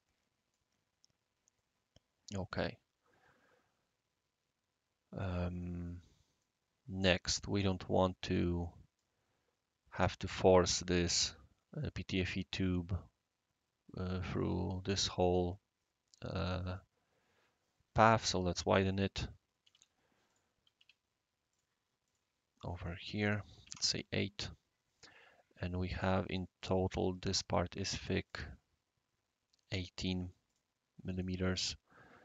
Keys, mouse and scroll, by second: 1.5-6.4 right drag, 7.1 middle drag, 7.4 right click, 10.2 click, 10.7 drag, 10.7-11.8 right drag, 14.3 click, 16.6 click, 17.0 click, 18.1 click, 19.6 shift+s, 20.3 click, 21.5 click, 21.8 typing, 22.0 click, 23.6 typing, 23.7 Return, 25.2 typing, 26.0 click, 26.6 click, 26.8 click, 26.8 right click, 28.1-28.9 typing, 28.3 click, 29.6 right click, 30.5 click, 30.5 right click.